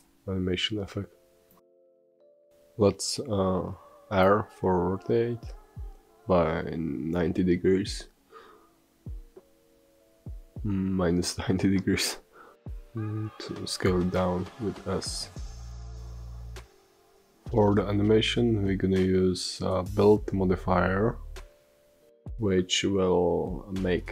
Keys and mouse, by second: 0.3 r, 6.2 r, 13.0 middle drag.